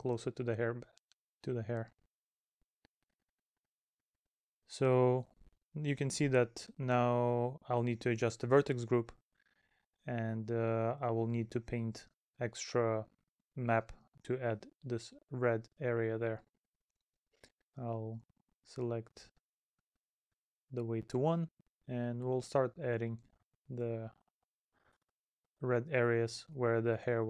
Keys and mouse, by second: 0.7 middle click, 1.3 middle click, 2.4 middle click, 3.4 middle click, 7.2 middle click, 12.8 middle click, 14.4 middle click, 16.3 middle click, 17.6 middle click, 19.9 middle click, 22.5 middle click, 26.2 middle click.